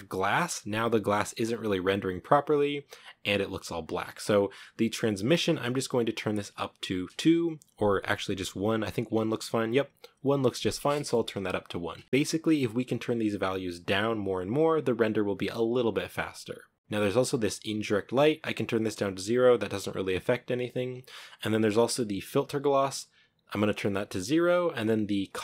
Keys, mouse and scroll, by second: 1.7 scroll down 1, 4.7-9.0 drag, 9.0-9.8 scroll up 6, 10.3 scroll down 5, 10.9 shift+middle click, 11.7-12.0 scroll down 1, 18.1-20.5 drag, 20.5-21.3 scroll down 3, 23.7-25.4 drag.